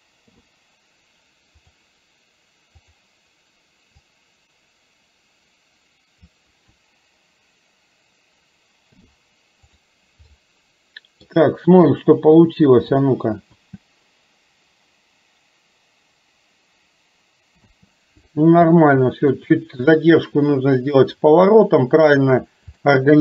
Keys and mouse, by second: 0.3 i, 2.8 click, 4.1-6.3 drag, 8.9 i, 10.5 middle click, 13.6 space, 17.7 space, 18.8 middle click, 22.8 shift+middle click.